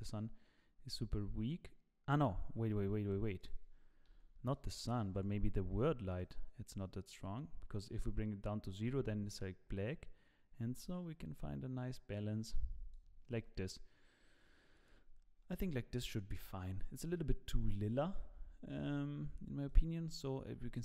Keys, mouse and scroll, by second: 3.4 click, 6.1 click, 7.7 click, 19.6 click.